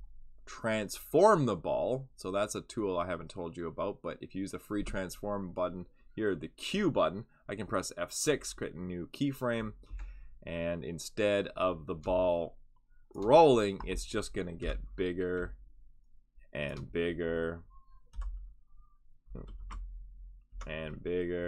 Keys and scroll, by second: 8.2 F6, 9.8 q, 14.6 F6, 18.1 F5, 19.6 ctrl+z, 20.5 F6.